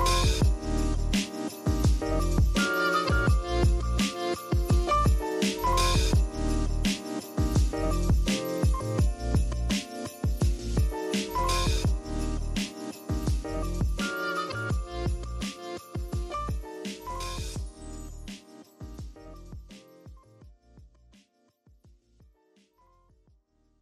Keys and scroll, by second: 5.3-6.5 typing, 13.7 super+z, 21.8 v, 23.2 super+y.